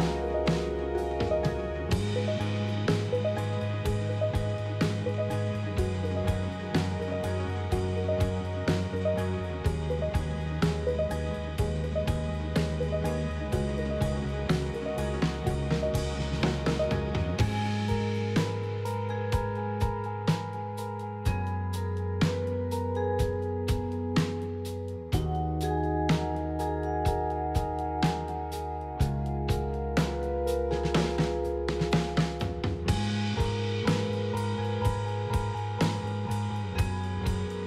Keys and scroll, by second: 7.5 p, 11.3 f, 13.7 p, 13.9 F4, 16.8 Delete, 17.5 s, 24.5 Delete, 33.7 4, 33.8 Delete, 36.8 Delete.